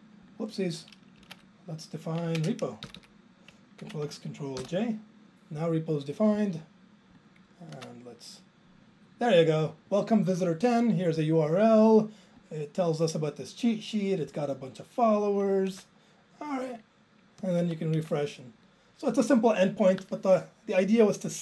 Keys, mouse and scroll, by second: 1.3 Right, 1.5 Up, 2.4 ctrl+space, 2.9 Down, 3.0 Down, 4.7 ctrl+j.